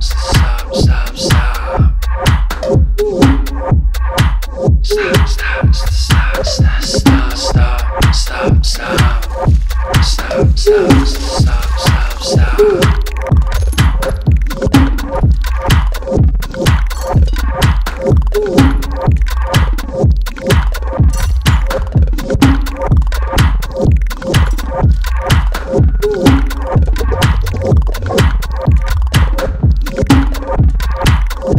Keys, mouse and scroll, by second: 1.2-1.8 drag, 6.1 ctrl+z, 7.4 click, 9.5 click, 9.7 ctrl+z, 13.2 ctrl+z, 15.8-16.1 scroll up 1, 16.4 ctrl+click, 16.5 typing, 17.6 click, 20.3 ctrl+z, 20.7 click, 23.2 ctrl+z, 23.9 ctrl+d, 24.7 ctrl+click, 28.6-31.5 drag.